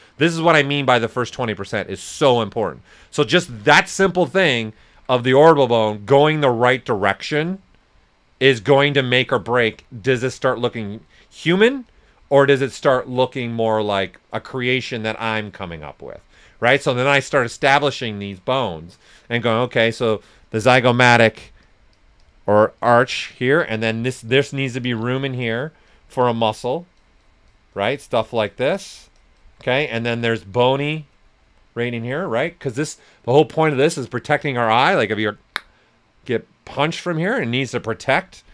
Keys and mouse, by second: 4.9 ctrl+z, 6.3 right click, 7.1-10.6 alt+drag, 10.6 right click, 11.8-13.9 alt+drag, 13.9-16.3 alt+drag, 16.3 right click, 18.7 alt+right click, 20.8 alt+click, 23.3 right click, 24.1 alt+click, 24.5-25.3 typing, 24.8 click, 29.7 right click, 30.1 s, 30.2-34.6 drag, 37.5 right click, 38.1 click.